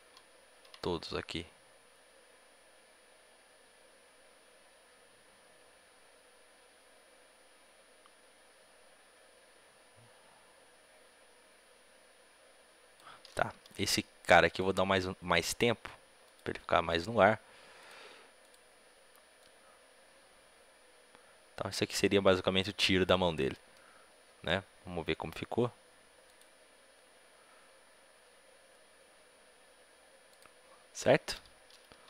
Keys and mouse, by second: 0.2 ctrl+v, 0.8-2.6 drag, 15.2 a, 15.2 b, 15.2 g, 17.6-21.1 drag, 23.4-26.2 middle drag, 26.2-28.1 drag, 30.2-32.0 drag.